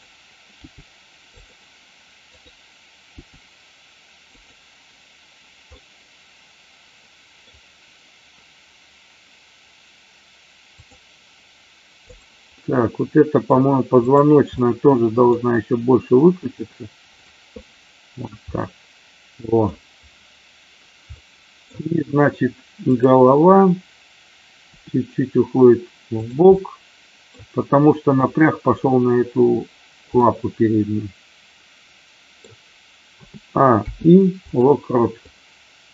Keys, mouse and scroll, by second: 0.6 g, 1.2 click, 4.3 click, 5.7-7.5 middle drag, 12.0 click, 12.5-13.3 middle drag, 13.9-14.4 drag, 14.6-15.3 middle drag, 16.3 r, 17.6 middle click, 18.4-19.6 middle drag, 19.6-21.1 scroll down 1, 21.1-21.6 middle drag, 21.6-22.1 scroll down 1, 22.8 click, 24.7 r, 26.1 click, 26.4-27.2 middle drag, 30.2-32.4 middle drag, 33.2 a, 33.7 i, 35.2-35.9 drag.